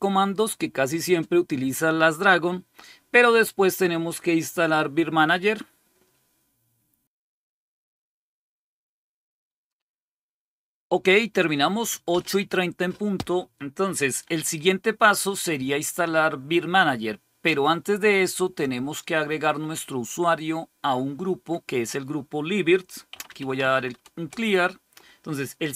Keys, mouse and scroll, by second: 22.7-24.1 typing.